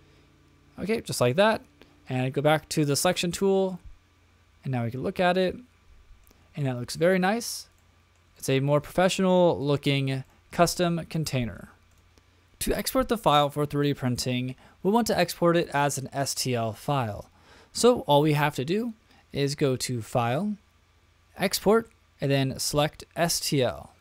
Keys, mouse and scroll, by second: 2.8 click, 3.3 click, 3.7-6.4 middle drag, 6.6 shift+middle click, 7.1-7.6 middle drag, 7.8-8.2 shift+middle drag, 8.4 middle click, 9.0-9.5 shift+middle drag, 9.6 middle click, 10.2 shift+middle click, 11.1-12.0 shift+middle drag, 20.0-24.0 drag.